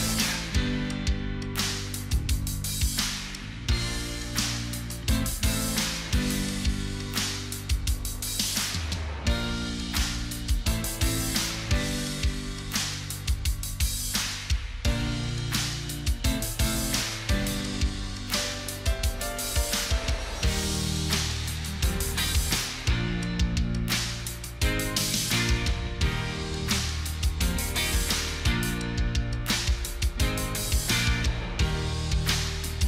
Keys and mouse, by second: 1.1 right click, 6.6 shift+click, 11.7 ctrl+click, 24.8 1, 25.4 5, 32.1 typing.